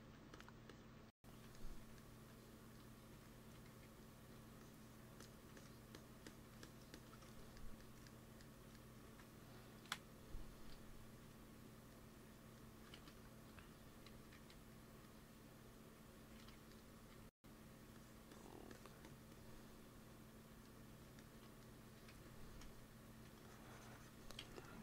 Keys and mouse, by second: 1.5-2.5 drag, 3.6 f, 4.1 f, 4.5-8.8 drag, 8.9 ctrl+s, 9.8 KP_1, 10.5 KP_3, 12.8 shift+c, 14.0 g, 14.2 f, 14.5 click, 14.8 f, 15.3 click, 16.3 shift+c, 17.0 f, 17.8-21.1 drag, 21.1 middle click, 21.8 x, 22.0 f, 22.5 f, 23.0 f, 23.3-24.3 drag, 24.3 ctrl+z.